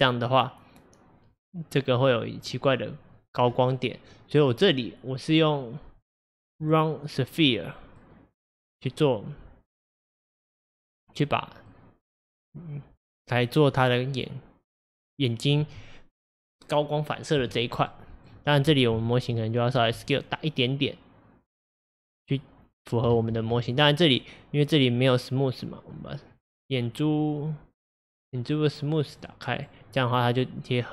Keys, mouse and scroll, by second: 6.1 click, 6.8-8.7 middle drag, 8.7 click, 10.6-16.6 middle drag, 18.0-19.8 middle drag, 19.8 s, 23.2 ctrl+z, 23.8 click, 29.2 click, 29.6 click, 30.2-30.9 middle drag.